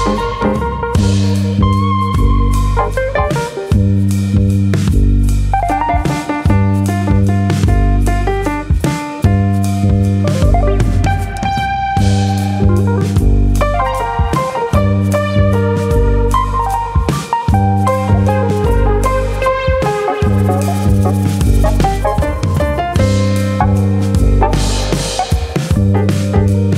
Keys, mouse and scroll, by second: 0.2 g, 1.7 click, 1.7 middle click, 2.2 scroll up 1, 3.1 middle click, 3.1-4.0 scroll up 1, 4.0 middle click, 7.8 middle click, 7.8 2, 7.8 click, 8.7 middle click, 8.7 shift+click, 9.5 KP_3, 10.4 click, 11.5 middle click, 12.5 alt+click, 12.8 middle click, 13.3 click, 14.7 middle click, 15.8 click, 16.6 shift+click, 16.9 middle click, 17.6 click, 18.4 middle click, 19.1 click, 19.6 click, 19.9 shift+middle click, 20.2 middle click, 21.2 ctrl+click, 21.5 middle click, 22.2 ctrl+click, 23.0 click, 24.2 click, 24.4 ctrl+click, 24.4 middle click, 25.0 middle click, 25.2 shift+middle click, 25.5 shift+middle click, 26.2 middle click.